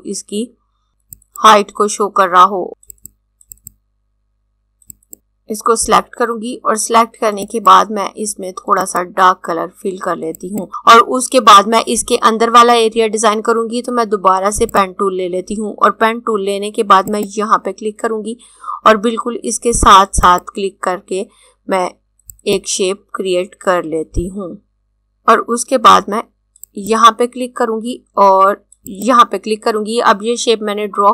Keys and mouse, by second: 0.5 click, 1.1 click, 1.9 click, 3.1 click, 4.1 click, 4.9 click, 7.4 click, 14.6 click, 19.9 click, 22.3 click, 23.9 click, 24.5 click.